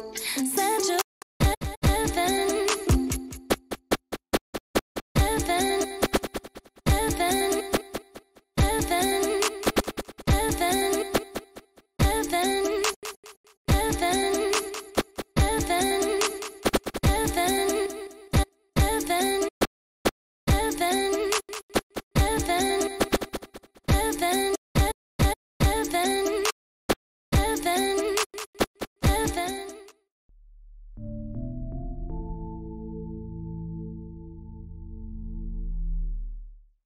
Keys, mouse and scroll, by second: 0.7-8.6 typing, 9.6-13.7 typing, 14.9 f, 15.4 c, 16.6-25.6 typing, 26.9-29.9 typing.